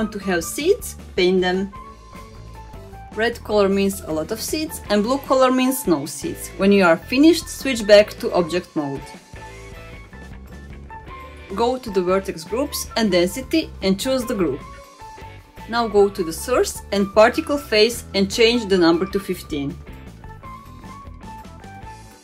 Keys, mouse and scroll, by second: 1.4-2.5 middle drag, 3.0 click, 4.2 middle click, 5.1 click, 6.0 middle click, 6.9 click, 7.4-8.5 middle drag, 9.0 click, 9.3-10.6 middle drag, 11.4-12.1 drag, 12.6-12.9 middle drag, 14.0-14.9 drag, 15.6-16.5 scroll up 4, 16.5-18.5 scroll up 2, 18.5-20.2 middle drag, 20.3-20.7 scroll up 1, 20.7 click, 21.8-22.2 middle drag.